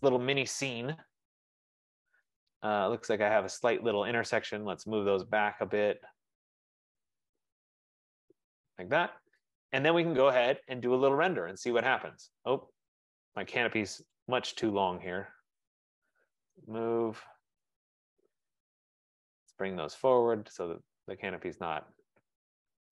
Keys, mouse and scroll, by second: 2.5 Escape, 3.7 click, 4.7-5.1 typing, 6.6 click, 8.4 click, 9.5 Escape, 12.0 right click, 12.8 middle click, 13.0 middle click, 13.3 middle click, 14.2 click, 15.2 shift+click, 16.6 typing, 18.6 click, 19.7 click, 20.6 Return, 21.5 right click, 22.0 middle click, 22.6 middle click.